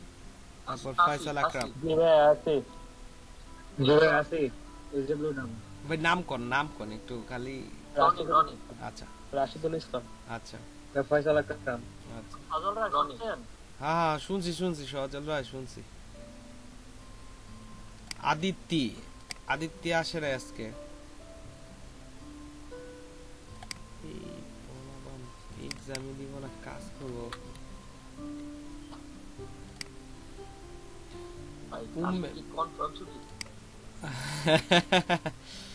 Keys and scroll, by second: 27.1 BackSpace, 28.1 shift+a.